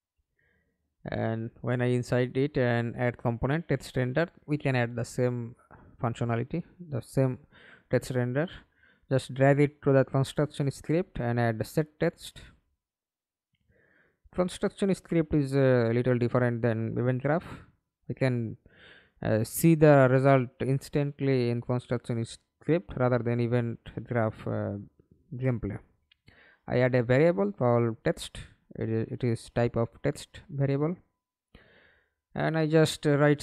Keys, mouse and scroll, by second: 0.0-0.6 typing, 2.2 alt+click, 5.0 right click, 8.6-10.6 typing, 10.8 Up, 11.2 Return, 20.7-22.6 typing, 32.1-33.4 typing.